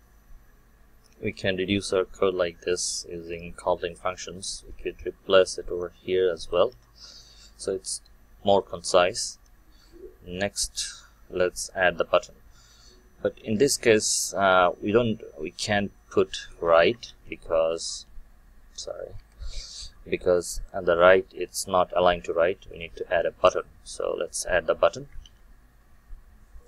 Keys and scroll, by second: 4.5 ctrl+c, 6.6 ctrl+v, 17.0 ctrl+Tab, 25.2 ctrl+Tab.